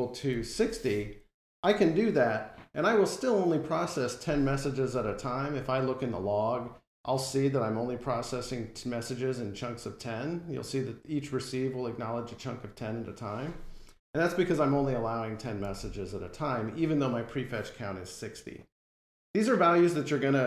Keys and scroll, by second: 1.5 F5.